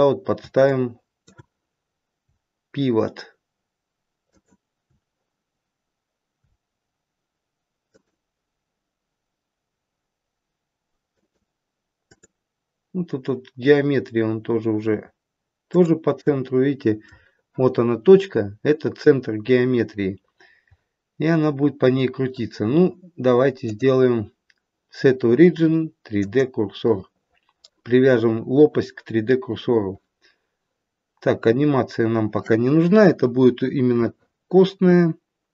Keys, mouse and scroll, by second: 20.4-20.8 scroll down 1.